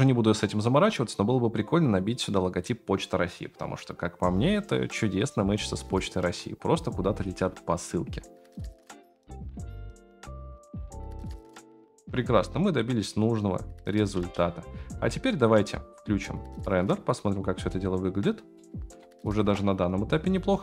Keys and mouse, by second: 5.4-5.8 shift+middle drag, 7.2 space, 14.1 space, 15.0-15.4 middle drag, 18.5 middle click, 19.4 KP_0.